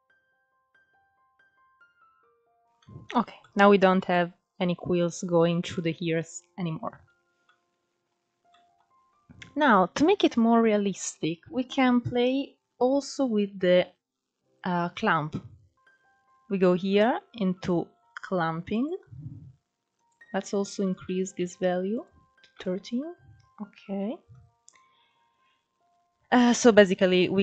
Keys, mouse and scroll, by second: 0.2-1.6 drag, 1.6 middle click, 2.1 scroll up 1, 2.2 click, 2.3 scroll down 2, 2.5 middle click, 2.6 scroll up 1, 2.8-3.8 middle drag, 3.8-4.3 scroll up 1, 4.3-4.7 middle drag, 4.7 scroll up 1, 4.9-6.0 middle drag, 6.0 scroll down 5, 6.2-6.8 middle drag, 6.8-7.3 scroll up 2, 7.3-10.8 shift+middle drag, 7.7-8.4 scroll up 1, 10.8-12.6 scroll down 7, 12.6-14.0 scroll up 4, 14.0-15.8 scroll down 2, 17.5-20.8 drag, 21.3-23.6 middle drag, 23.6-26.4 scroll up 1, 26.4 scroll up 1.